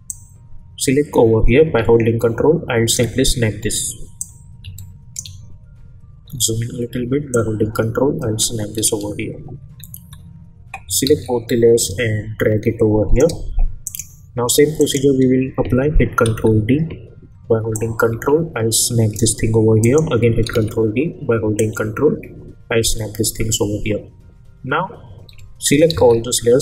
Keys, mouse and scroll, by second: 0.1-3.2 drag, 6.2 scroll up 1, 7.3-9.7 drag, 9.7-10.2 alt+scroll down 1, 11.0 ctrl+a, 11.8-13.8 drag, 16.2 ctrl+d, 17.7-19.8 drag, 20.5 ctrl+d, 21.6-23.1 ctrl+drag, 25.6 ctrl+click, 25.9 ctrl+a.